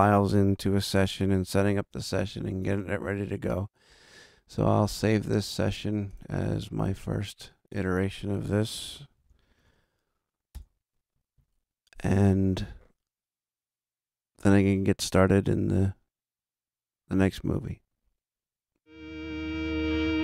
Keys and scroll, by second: 9.1 0, 9.6 1, 10.5 Return.